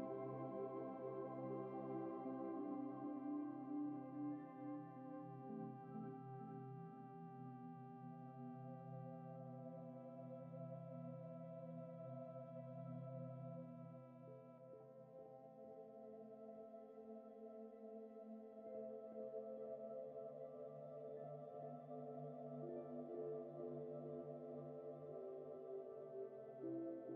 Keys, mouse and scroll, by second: 8.8 alt+Tab, 14.3 ctrl+a, 17.2 scroll down 1, 18.5 ctrl+v, 19.2 ctrl+t, 19.6 typing, 21.5 ctrl+t, 22.2 shift+click, 24.7 Return, 24.7 shift+click, 25.5 alt+click, 26.2 ctrl+z, 26.2 alt+click, 26.9 alt+click.